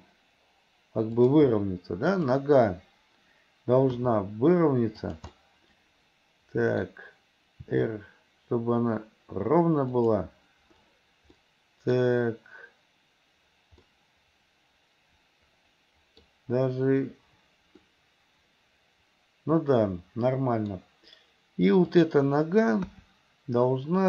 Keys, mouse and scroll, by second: 2.2 click, 4.0 r, 5.4 middle click, 6.0 middle click, 7.6 r, 11.5 middle click, 13.9-16.3 middle drag, 17.9 middle click, 18.7 middle click, 22.0 click, 22.9 KP_1.